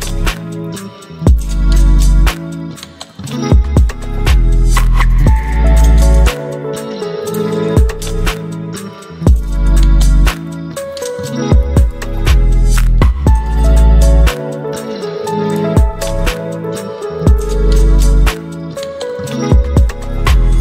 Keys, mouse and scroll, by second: 6.9 click, 16.3 ctrl+g, 18.3 click, 19.4-20.6 typing.